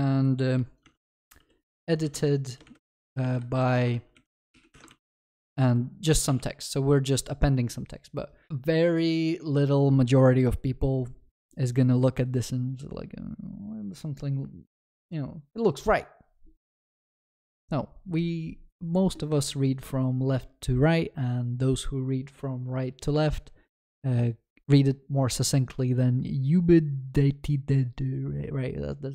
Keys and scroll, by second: 3.9 ctrl+s, 4.8 Delete.